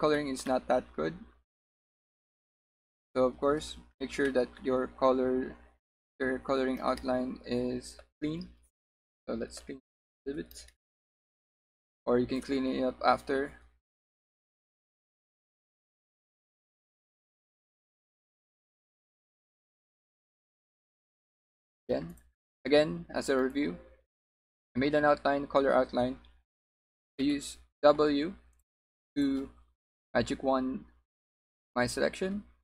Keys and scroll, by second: 4.7 b, 21.6 w, 27.3 w.